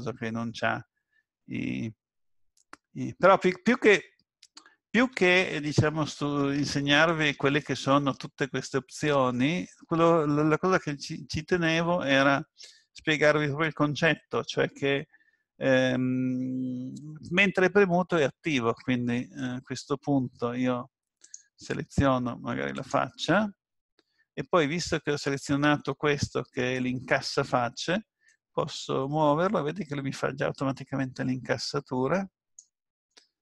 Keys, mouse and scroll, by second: 5.0 Tab, 17.3 click, 21.3 click, 22.9 click, 28.3 click.